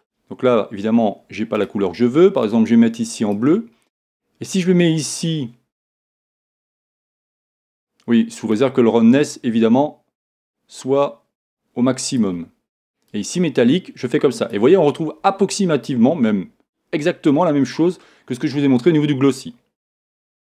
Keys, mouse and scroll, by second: 1.6-3.4 drag, 8.5-10.4 drag, 13.1-14.9 drag.